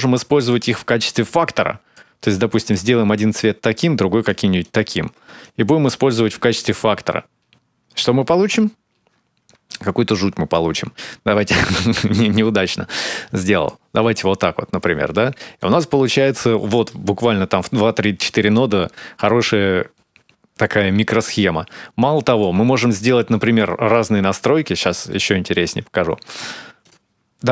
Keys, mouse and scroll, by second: 0.2 click, 2.4 click, 4.4 click, 5.2 click, 6.4 ctrl+shift+click, 7.0 ctrl+shift+click, 9.5 click, 11.8 click, 14.1 scroll up 2, 14.5-14.9 scroll down 3, 14.9 middle click, 15.6-15.9 scroll up 1, 15.9-16.2 scroll down 1, 16.7 middle click, 17.1-18.0 scroll down 4, 20.4-21.8 scroll up 5, 21.8 click, 23.1 click, 23.7 click, 24.5-26.6 scroll down 3, 24.9 middle click, 26.6 click, 27.4 click.